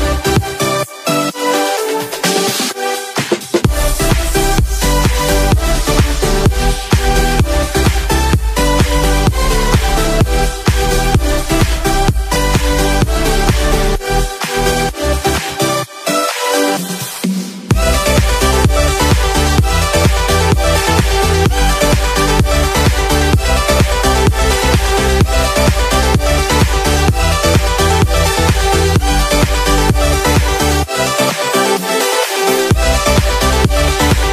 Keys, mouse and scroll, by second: 30.8-31.4 drag, 31.4 middle click, 31.8 middle click, 32.0-32.7 middle drag, 33.2-34.3 middle drag.